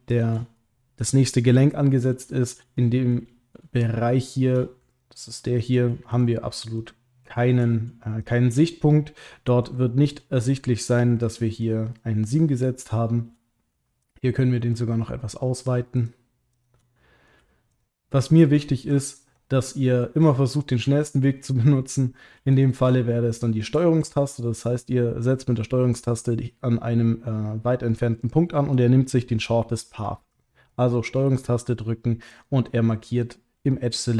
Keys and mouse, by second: 0.1 shift+click, 0.5 middle click, 2.4 shift+click, 2.7 middle click, 4.9 ctrl+click, 5.4 middle click, 6.8 shift+click, 7.3 shift+click, 8.3 shift+click, 8.6 middle click, 9.9 ctrl+click, 10.5 middle click, 11.2 ctrl+click, 11.9 middle click, 16.5 shift+click, 16.9 middle click, 19.1 ctrl+click, 19.6 middle click, 20.3 ctrl+middle click, 22.5 shift+click, 23.1 middle click, 30.9 middle click, 32.4 ctrl+click, 32.9 middle click.